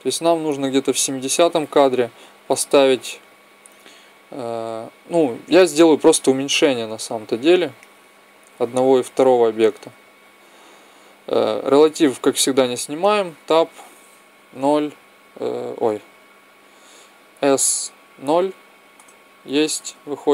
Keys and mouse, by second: 2.2-4.1 right drag, 4.3-11.3 drag, 7.9-9.7 right drag, 12.9 Tab, 14.2 KP_0, 17.0 s, 19.7 Tab.